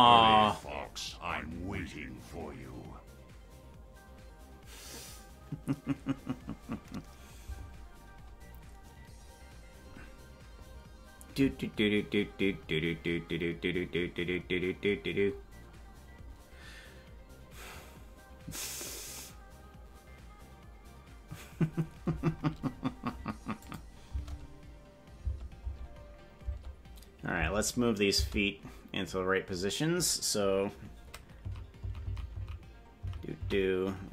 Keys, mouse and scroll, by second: 23.7 click, 24.0 space, 25.2 space, 25.6 space, 26.5 space, 27.3 space, 28.4 space, 31.5 Left, 31.9 Left, 32.3 Left, 33.0 Left, 33.1 Right, 33.8 Right.